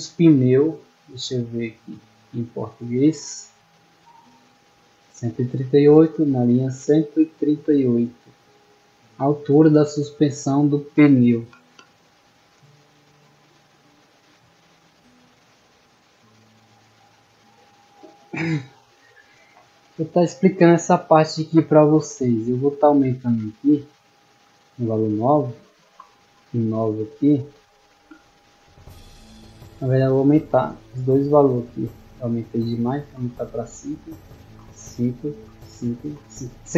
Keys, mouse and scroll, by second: 1.9-3.4 drag, 4.6 click, 5.5-7.6 scroll down 3, 9.0 click, 9.7-10.9 middle drag, 20.6-21.2 shift+middle drag, 23.0 click, 30.5 click, 32.0 click.